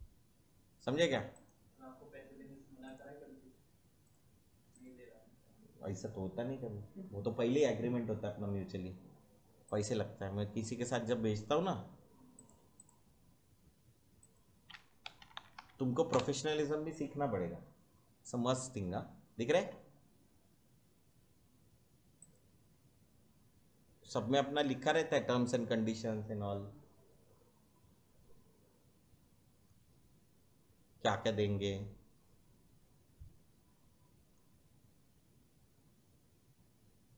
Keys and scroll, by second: 14.7-16.0 typing, 16.0 Return.